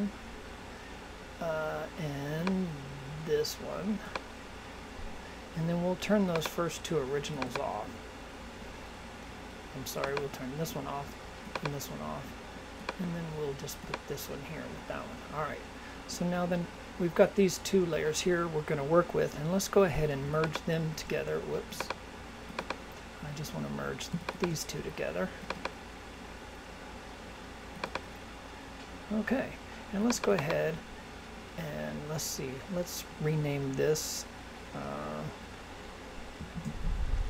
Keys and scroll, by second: 36.5 shift+b.